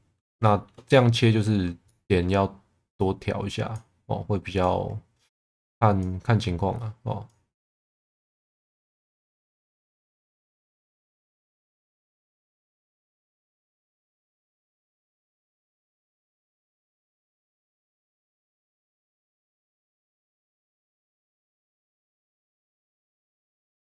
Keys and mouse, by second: 0.4 middle click, 0.9 middle click, 1.9 middle click, 3.0 click, 5.3 click, 6.7 click, 9.2 click, 11.2 click, 11.6 click, 13.4 click, 13.7 middle click, 15.0 click, 15.5 click, 17.7 click, 18.6 click, 20.0 click, 23.3-23.8 middle drag.